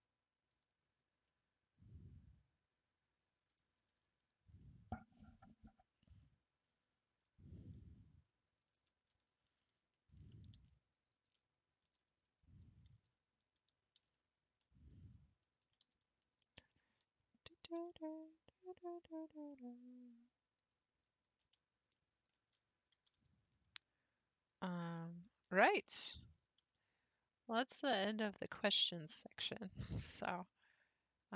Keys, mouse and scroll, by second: 0.9-1.3 scroll up 2, 1.3-4.0 middle drag, 4.0 Tab, 4.6-5.6 middle drag, 5.6 scroll down 1, 5.7-6.1 scroll up 2, 6.1-7.3 middle drag, 7.3-7.6 scroll up 4, 7.7-8.8 middle drag, 8.8 Tab, 9.2 scroll up 3, 9.6 shift+middle click, 10.6 ctrl+r, 11.9 ctrl+r, 13.6 1, 15.5 alt+click, 16.6 g, 17.8 g, 19.1-19.4 scroll down 4, 19.5-21.0 middle drag, 21.0-21.5 scroll up 4, 22.2 alt+click, 22.9 g, 25.4 alt+click, 25.9 middle click, 26.6 g, 28.8 alt+click, 30.3 g.